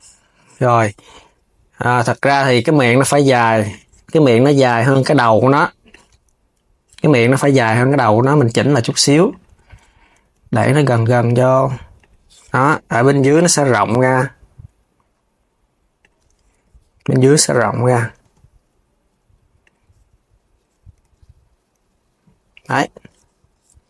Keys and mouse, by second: 3.3 shift+click, 4.9 shift+click, 5.5 shift+click, 5.8 KP_3, 7.3 click, 7.9 shift+click, 8.5 shift+click, 8.9 shift+click, 9.4 KP_3, 9.9 g, 12.8 click, 13.0 KP_3, 13.5 g, 17.0 click, 17.5 KP_3, 17.9 g, 20.7 g.